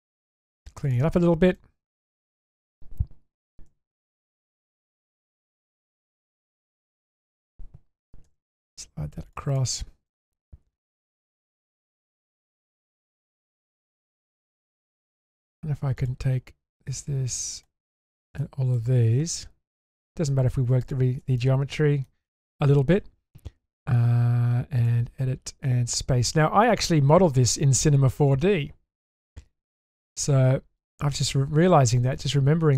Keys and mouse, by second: 0.8 click, 1.5-2.3 middle drag, 3.7 2, 5.4 click, 6.1 ctrl+click, 7.2 ctrl+click, 8.2 g, 9.5 click, 10.1-11.5 middle drag, 11.7 shift+middle click, 12.0 middle click, 13.6-14.6 middle drag, 16.0 ctrl+alt+click, 16.7 ctrl+shift+click, 18.0 ctrl+shift+click, 18.4 middle click, 20.8 ctrl+shift+click, 21.4-22.0 middle drag, 30.8 click.